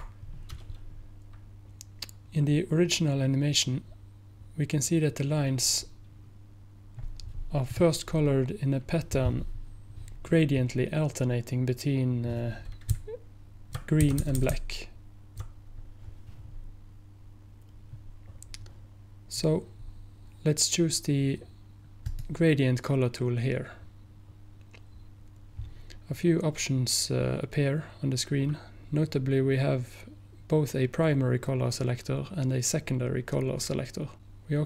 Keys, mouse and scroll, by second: 7.8 click, 12.9 Right, 13.5 Right, 13.5 Right, 13.7 Right, 22.1 click, 24.1 click.